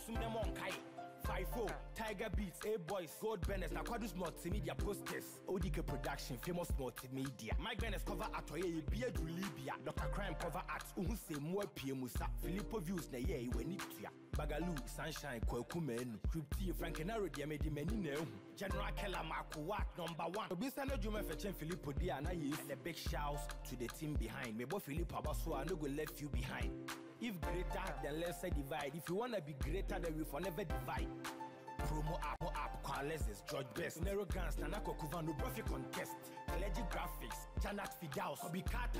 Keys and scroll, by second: 6.0 Down, 21.3 ctrl+t, 24.5 Return, 25.5 ctrl+d, 36.6 ctrl+-.